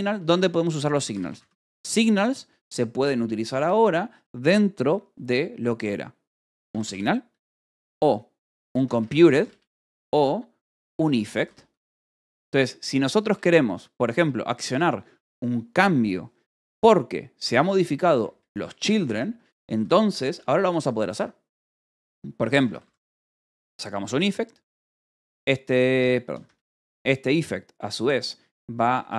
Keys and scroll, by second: 0.0-1.9 typing, 3.5 space, 4.7 space, 6.1-13.2 typing, 14.1 Return, 17.3 Escape, 17.8-20.5 typing, 19.3 Escape, 22.2-23.5 typing, 25.5 shift+[, 25.7 BackSpace, 26.9 shift+9.